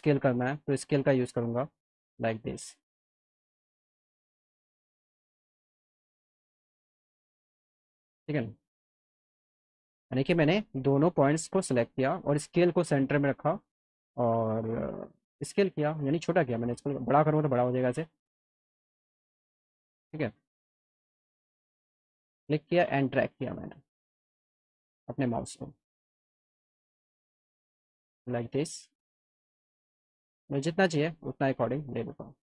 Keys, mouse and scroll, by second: 0.0 alt+middle click, 1.0-3.7 drag, 4.0 alt+middle click, 5.1 middle click, 5.4-6.4 alt+middle drag, 7.2-8.6 drag, 9.6 ctrl+z, 10.3 ctrl+z, 10.7 click, 11.6 ctrl+click, 14.6-15.8 drag, 17.1 click, 29.7-31.0 drag, 31.8-32.4 alt+middle drag.